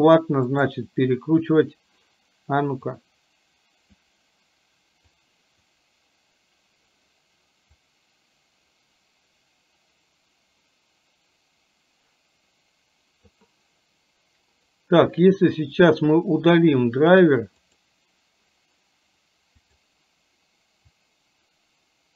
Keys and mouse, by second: 0.8-2.2 right drag, 3.2-4.2 drag, 5.2 click, 7.9-13.4 drag, 14.7-17.9 right drag, 19.8 click, 21.0-22.1 drag.